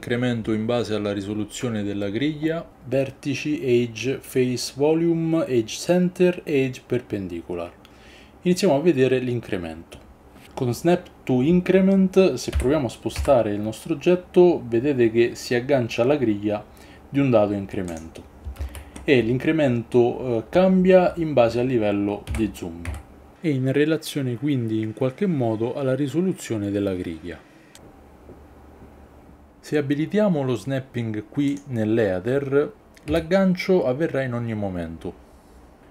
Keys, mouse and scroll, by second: 12.5 g, 13.2 x, 17.9-18.5 drag, 18.6 ctrl+z, 22.3 g, 22.8 x, 31.5 click, 33.1 g, 35.8 ctrl+z.